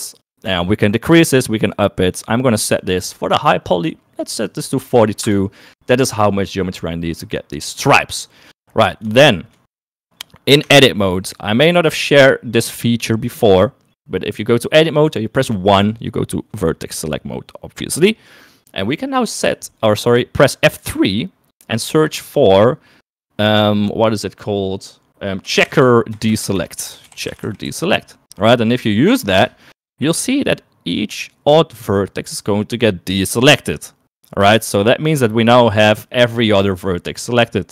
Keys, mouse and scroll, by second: 2.1-5.4 drag, 9.2 shift+middle click, 10.7 Tab, 15.8 1, 21.0 F3, 26.4 BackSpace, 26.5 BackSpace.